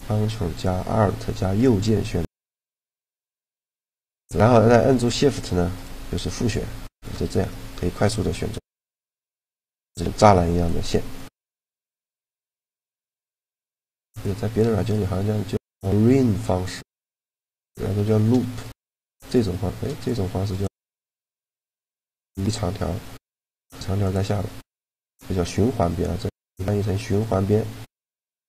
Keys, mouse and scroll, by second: 5.4 middle click, 5.6-6.9 right drag, 6.9 middle click, 7.2 click, 8.4 g, 9.2 middle click, 11.2-19.0 middle drag, 18.4-22.8 right drag, 22.5 a, 22.8 click, 23.8-25.4 drag.